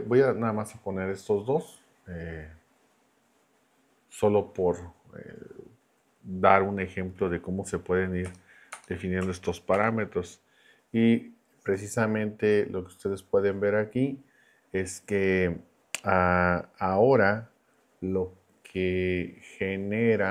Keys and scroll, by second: 8.3 BackSpace, 9.7 shift+9.